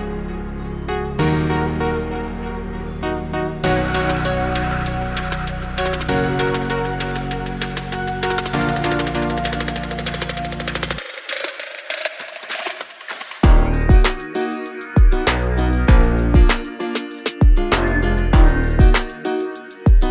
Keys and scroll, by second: 0.0-2.3 typing, 3.1 Right, 3.4 Left, 3.9 Right, 6.6 Up, 8.9 Up, 9.6 2, 9.9 0, 10.0 Return, 12.3 space, 12.9 Delete, 14.9 m, 18.5 space.